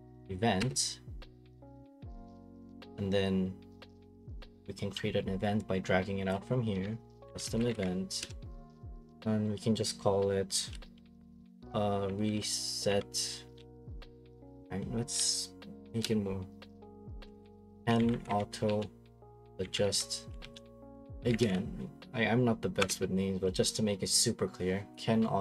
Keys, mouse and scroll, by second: 0.3-1.1 typing, 2.6 click, 2.8-3.2 scroll, 4.1 click, 6.7-8.4 typing, 11.0 typing, 13.2-14.1 typing, 15.1-15.9 typing, 17.0-21.4 typing, 22.8 Return, 25.0 click.